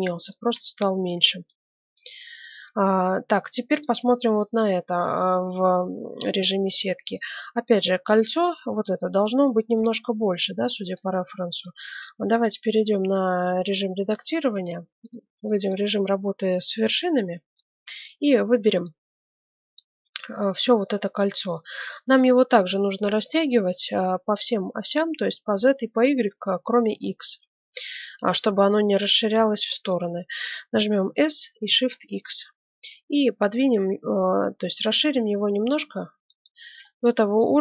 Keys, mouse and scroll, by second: 1.0 KP_1, 2.8 middle click, 3.7-5.6 right drag, 4.2 z, 7.1-9.1 middle drag, 10.5-13.7 middle drag, 10.5 scroll up 1, 11.8 Tab, 14.5 ctrl+Tab, 16.7 KP_1, 18.5 b, 19.4 click, 31.0 s, 36.8-37.6 middle drag.